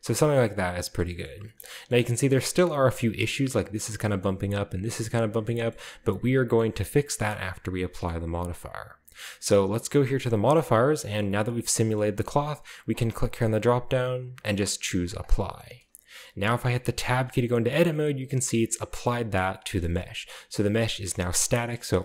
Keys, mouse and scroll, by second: 0.3-0.7 middle drag, 0.4-3.2 scroll up 2, 1.0-2.2 shift+middle drag, 2.2 typing, 2.4-3.1 middle drag, 3.9-4.9 shift+middle drag, 3.9-4.9 scroll down 1, 5.2-7.0 scroll down 2, 5.5 shift+middle drag, 5.7-7.0 shift+middle drag, 7.3-8.8 middle drag, 10.2 click, 11.5 middle click, 12.0-13.3 middle drag, 13.3 click, 15.2 click, 15.7 click, 16.3 middle click, 17.0 Tab, 17.3 scroll down 1, 17.4-18.1 middle drag, 17.9 a, 18.1 scroll down 1, 18.9-22.0 middle drag, 18.9-20.7 scroll up 2, 20.7-21.3 scroll down 2, 21.3-22.0 scroll up 3.